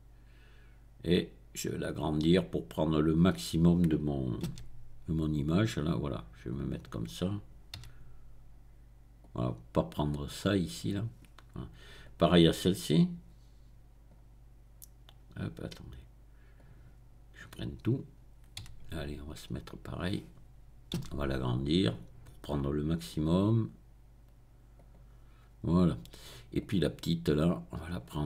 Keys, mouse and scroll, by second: 2.0 click, 4.5 s, 6.5 click, 7.8 g, 9.2 click, 12.0 click, 12.9-14.4 drag, 14.4-16.5 middle drag, 16.5-17.9 drag, 17.9-19.1 middle drag, 18.7 g, 19.9-21.1 drag, 21.1 s, 24.7 click, 25.1-26.5 middle drag, 26.5 click, 27.1 middle click, 27.3 click.